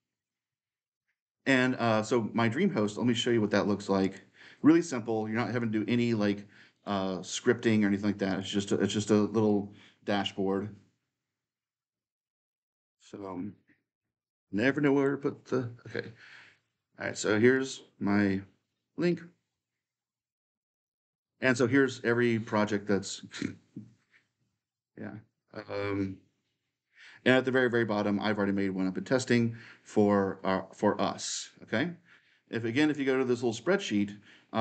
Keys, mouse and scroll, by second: 0.1-2.0 drag, 3.8-5.9 drag, 6.5-9.4 drag, 16.5 click, 18.9 click, 20.4-21.3 scroll down 2, 27.9-30.9 middle drag, 32.5-34.6 drag.